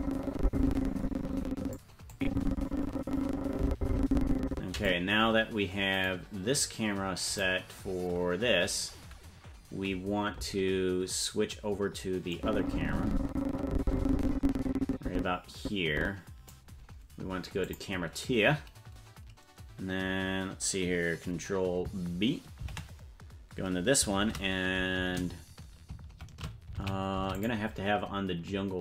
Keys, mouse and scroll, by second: 2.1-4.9 drag, 6.0 right click, 7.3 right click, 12.3-16.5 drag, 17.6 click, 22.6 ctrl+b, 24.2 shift+`.